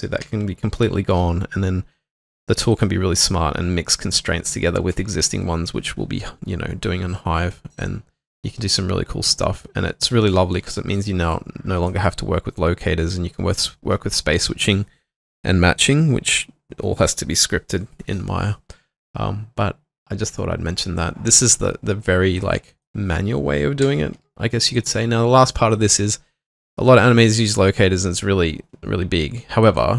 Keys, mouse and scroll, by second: 0.3 h, 2.8 double click, 23.9 h.